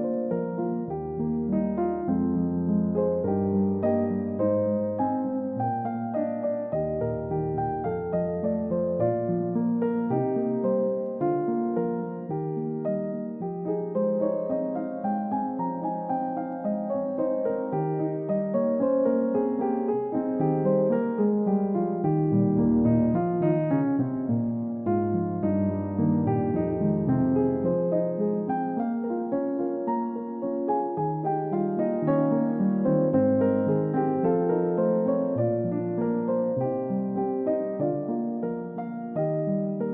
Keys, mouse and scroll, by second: 2.9-3.9 scroll up 1, 3.9-5.7 scroll down 1, 6.5 double click, 11.0 double click, 13.1 scroll up 1, 14.5 scroll down 1, 16.4 middle click, 20.8-21.2 scroll down 1, 21.2 middle click, 21.5 scroll down 1, 21.7 middle click, 22.0-23.0 scroll up 1, 23.3-24.0 scroll up 1, 24.0 middle click, 25.8-26.6 typing, 28.1-28.5 scroll up 1, 28.8 typing, 37.5 Return, 38.8-39.2 scroll down 1, 39.3 middle click, 39.6-39.9 scroll down 1.